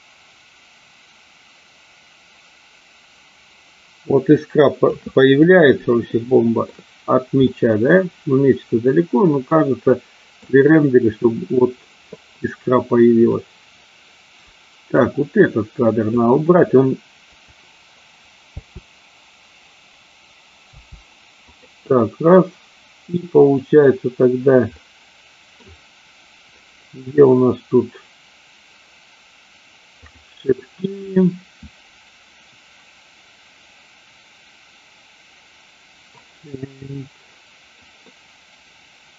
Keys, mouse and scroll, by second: 6.2-6.8 shift+middle drag, 7.6-10.6 middle drag, 13.4-15.2 drag, 15.4-16.2 drag, 18.6 Delete, 18.6 space, 20.8 space, 21.7 click, 24.8-25.8 middle drag, 30.1 click, 38.2-39.1 middle drag.